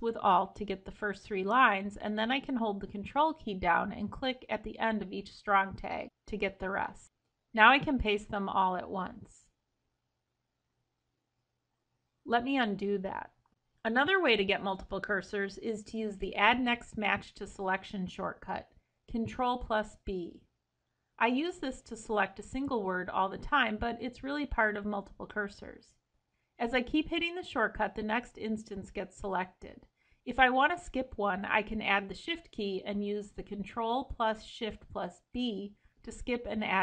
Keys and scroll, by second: 7.1 ctrl+v, 11.5 ctrl+z, 23.0 Escape, 25.8 ctrl+e, 25.9 ctrl+b, 27.6 ctrl+b, 29.8 ctrl+b, 33.8 ctrl+shift+b.